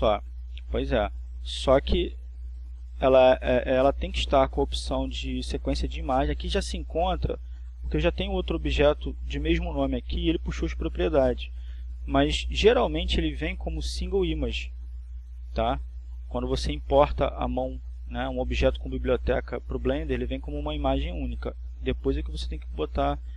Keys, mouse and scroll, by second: 0.5-2.3 drag, 12.5-13.5 scroll down 2, 14.8-15.7 scroll up 2, 17.0-19.2 drag.